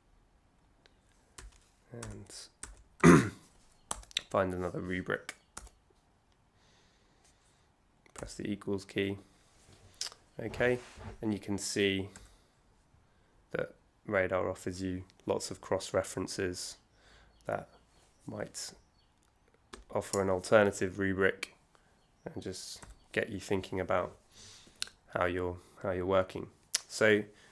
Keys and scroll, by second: 1.4 g, 2.0 r, 3.0 a, 3.9 Return, 8.2 =.